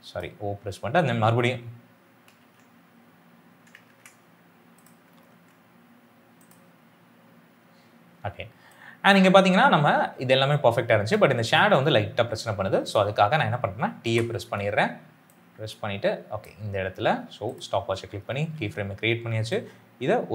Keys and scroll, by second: 2.3 ctrl+z, 3.7 ctrl+z, 13.9 t.